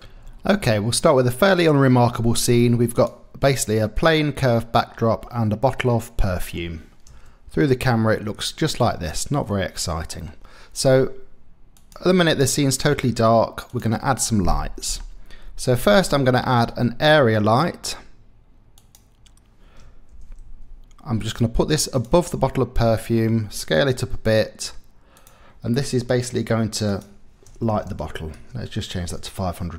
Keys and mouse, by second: 0.7-2.5 drag, 2.9 middle click, 4.0 middle click, 5.9 middle click, 7.1 KP_0, 9.5 click, 10.1 middle click, 11.8 click, 14.5 middle click, 16.0 shift+a, 20.1 g, 20.5 z, 22.3-23.1 drag, 23.9 s, 26.9 click, 27.9 click, 27.9 KP_0.